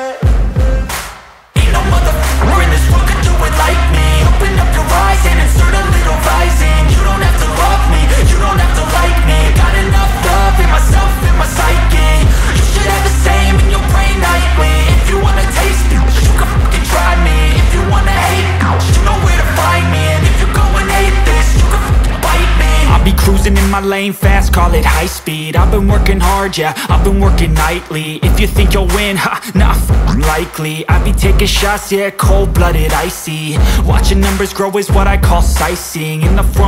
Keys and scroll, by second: 10.5 ctrl+space, 12.2 ctrl+space, 13.4 ctrl+t, 17.5 ctrl+space, 32.4 ctrl+alt+space.